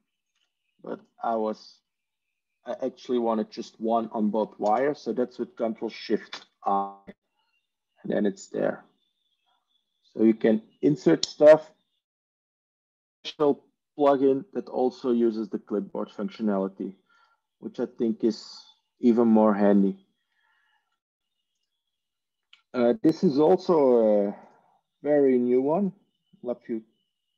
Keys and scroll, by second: 0.2 ctrl+z, 4.5 ctrl+space, 6.2 ctrl+shift+i.